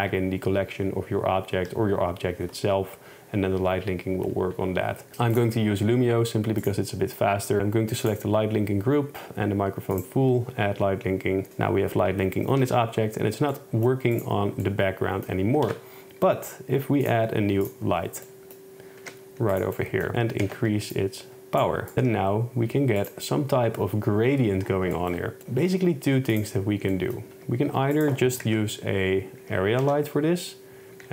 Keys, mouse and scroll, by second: 5.4 click, 6.7-8.2 drag, 10.0 click, 11.5 click, 12.6 n, 13.6 middle click, 14.2 click, 15.8 shift+a, 18.3 drag, 19.1 g, 20.5 shift+Tab, 21.9 KP_0, 22.0 g, 23.1 click, 25.7 r, 26.4 click, 27.0 middle click, 27.4 r, 28.5 KP_0, 29.5 g, 29.9 x.